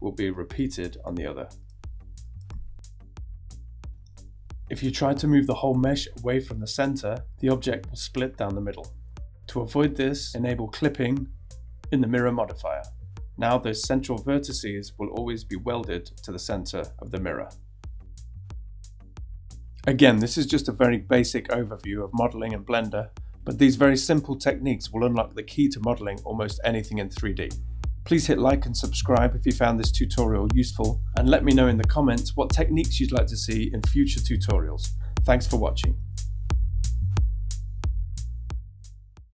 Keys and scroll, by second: 0.4 e, 1.1 s, 1.4 e, 5.7 g, 10.1 super+z, 13.3 g, 15.2 super+z, 15.5-27.5 typing, 20.8 super+z, 22.5 Tab, 27.0 Tab, 27.9 Tab.